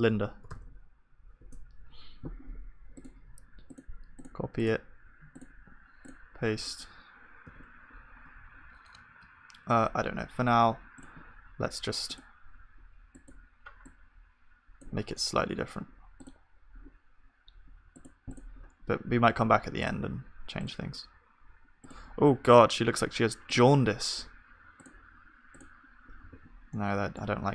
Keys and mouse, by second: 7.4 ctrl+s, 15.1-20.3 middle drag, 26.3 ctrl+s, 26.3-27.5 drag, 26.7-27.5 middle drag.